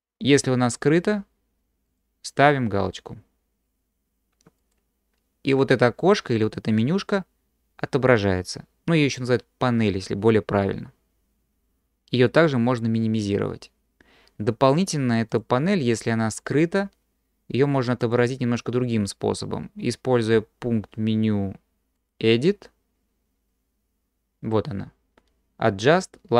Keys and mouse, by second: 1.9-5.2 drag, 15.4-18.1 drag, 22.0-26.3 drag.